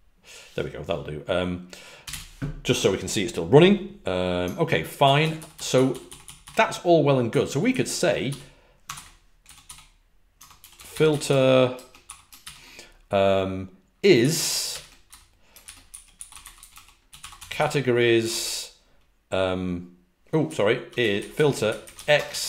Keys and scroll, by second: 1.7-2.5 typing, 5.3-5.8 typing, 6.9-11.7 typing, 15.9-18.1 typing, 20.1-22.4 typing.